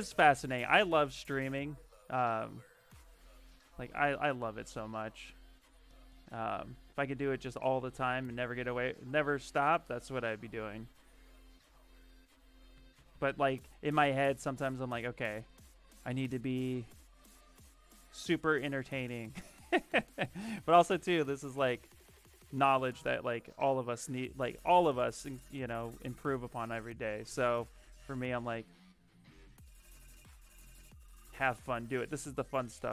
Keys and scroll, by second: 2.7 shift+d, 4.1 d, 10.6 shift+d, 12.6 d, 12.8 d, 13.0 d, 26.4 s.